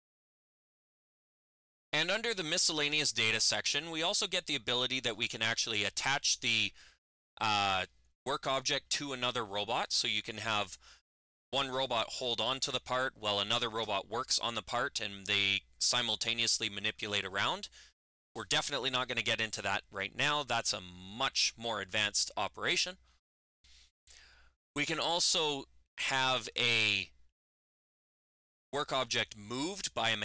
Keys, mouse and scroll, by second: 2.8 click, 26.7 click.